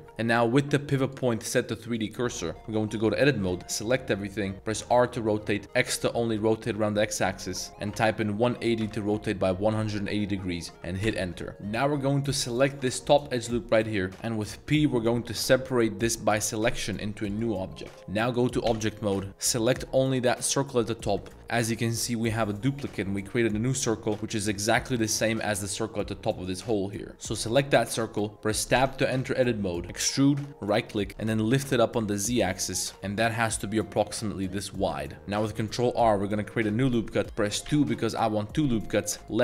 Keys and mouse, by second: 0.0 click, 1.0-2.0 drag, 2.5 Tab, 2.9 a, 3.5 z, 3.8 middle click, 4.7 r, 5.8 x, 7.9 1, 8.4 8, 8.8 0, 11.1 Return, 11.5 Tab, 11.5-12.3 drag, 12.6 alt+click, 14.6 p, 18.7 Tab, 20.2 click, 21.6 g, 24.8 click, 26.5 click, 27.1 middle click, 28.8 Tab, 29.8 e, 30.6 click, 31.2 g, 31.5 z, 35.1 ctrl+r, 35.6 ctrl+r.